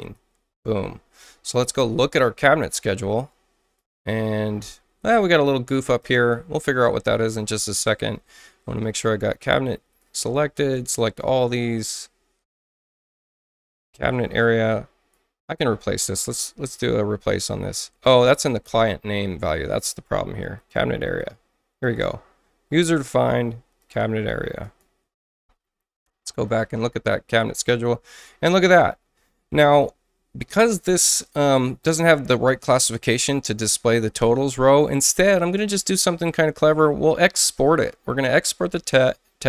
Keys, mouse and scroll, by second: 0.6 click, 2.0 click, 3.3 space, 3.8 click, 6.0 click, 9.5 shift+click, 14.3 click, 14.7 click, 15.6 click, 18.7 BackSpace, 20.6 click, 21.1 click, 21.8 click, 23.8 click, 24.6 click, 26.5 click, 28.2 click, 30.5 click, 34.5 click, 36.6 click.